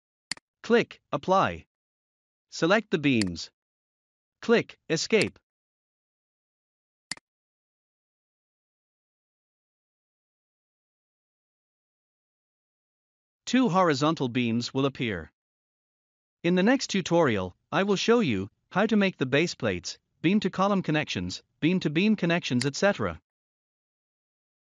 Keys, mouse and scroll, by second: 3.1 click, 5.1 click, 7.0 click, 7.7-8.7 scroll up 1, 10.1 middle click, 11.5 scroll down 1, 12.6 middle click, 13.4 scroll up 1, 22.5 click.